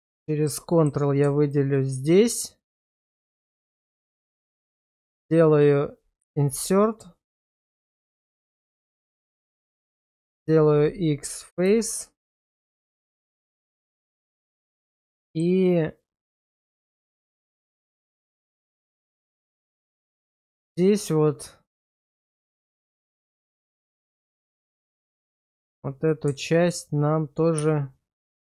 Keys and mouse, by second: 0.1 middle click, 0.7 shift+middle click, 2.0-3.4 middle drag, 3.7 middle click, 6.2 i, 9.4 click, 10.3 x, 11.8 shift+middle click, 12.7 shift+middle click, 13.3 middle click, 14.3 middle click, 15.2 shift+middle click, 15.7-17.5 middle drag, 18.3 shift+middle click, 18.7 middle click, 20.1 shift+middle click, 20.6 Tab, 21.8 Tab, 23.4 shift+middle click, 24.0-25.3 middle drag, 25.5 shift+middle click, 27.6 x.